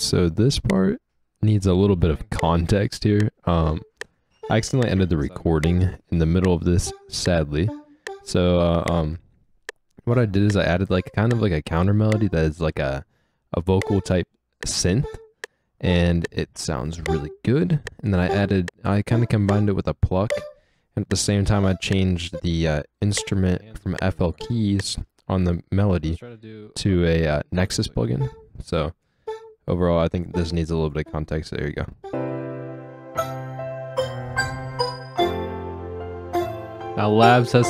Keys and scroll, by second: 0.7 space, 2.3 space, 12.6 space, 13.8 space, 22.3 space, 23.1 space, 24.9 space.